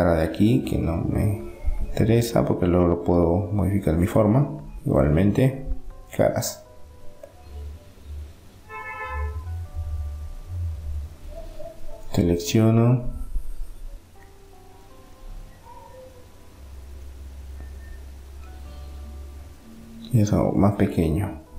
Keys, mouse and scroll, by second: 4.1 click, 4.4-5.8 right drag, 5.4 Delete, 8.3-10.2 drag, 10.4-12.8 right drag, 12.8 middle click, 14.4 KP_7, 16.4 a, 16.8 a, 19.7 s.